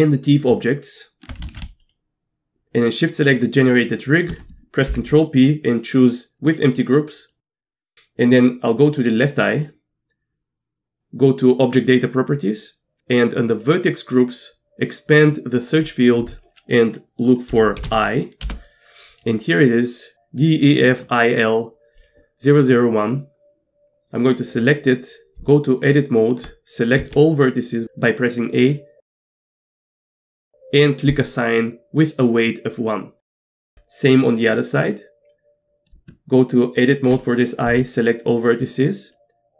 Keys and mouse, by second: 0.5 shift+click, 1.5 ctrl+z, 4.9 ctrl+p, 7.8 click, 11.7 click, 15.2 click, 15.8-19.4 drag, 22.0-25.4 drag, 25.4 Tab, 27.0 a, 31.1 click, 33.6 Tab, 35.9 Tab, 37.7 a.